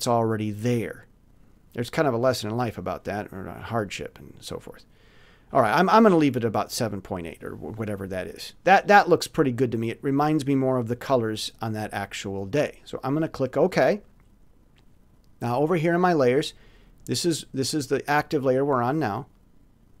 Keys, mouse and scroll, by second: 3.4 click, 13.3 middle click, 17.6 middle click.